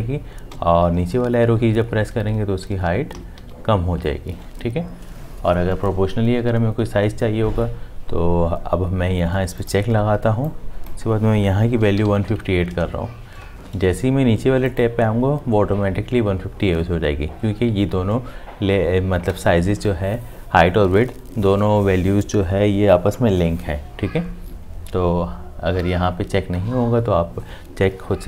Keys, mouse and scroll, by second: 0.5 Down, 3.1 Up, 11.7-12.6 typing.